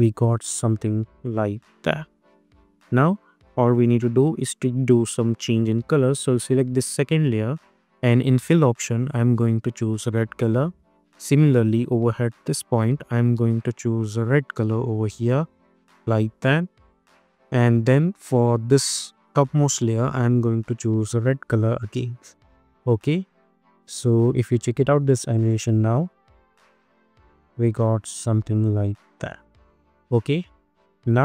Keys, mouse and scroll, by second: 2.3 space, 3.0-21.3 drag, 22.0 space, 24.3 space, 24.9 click, 25.4 space, 29.6 space.